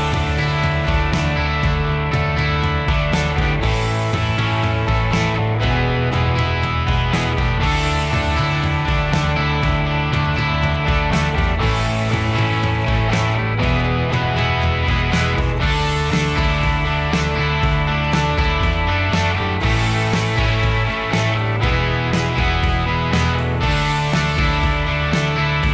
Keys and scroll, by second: 0.0-0.3 typing, 1.8 m, 3.8 m, 5.3-7.4 typing, 8.5 ctrl+a, 9.1 ctrl+h, 10.5 p, 19.9 Escape, 21.5 h.